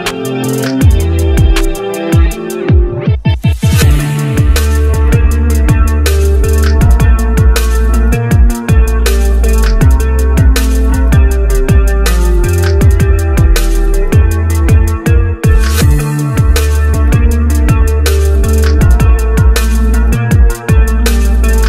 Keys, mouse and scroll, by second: 0.5-1.7 shift+middle drag, 1.7-2.3 scroll down 3, 2.3 click, 3.1-4.7 drag, 5.9 click, 6.1 click, 6.8 click, 7.2 middle click, 7.8-9.2 drag, 9.2-10.7 scroll up 4, 10.7-13.3 drag, 13.4 Tab, 13.9 g, 14.3 click, 14.9-16.5 drag, 16.9 click, 17.5-17.9 scroll down 3, 17.9-18.7 scroll up 1, 18.7 g, 20.5 ctrl+z, 20.6 ctrl+z, 20.8 ctrl+z, 21.0 ctrl+z, 21.3 ctrl+z.